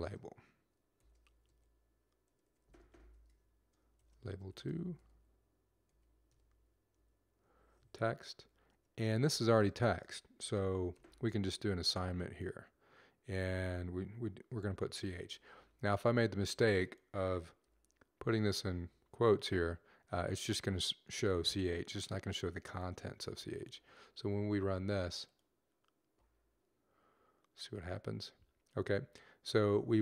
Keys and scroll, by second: 4.0-7.2 typing, 8.3 Down, 10.9 typing, 14.3 typing, 17.5 typing, 20.9 typing.